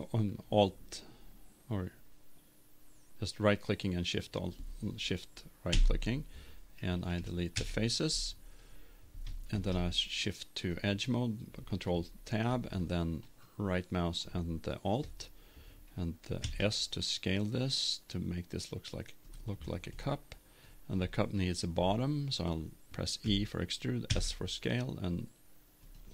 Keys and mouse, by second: 5.7 Delete, 7.1 Down, 9.5 ctrl+Tab, 13.2-15.0 right drag, 16.4 s, 19.5-21.1 drag, 21.7-23.3 middle drag, 23.3 e.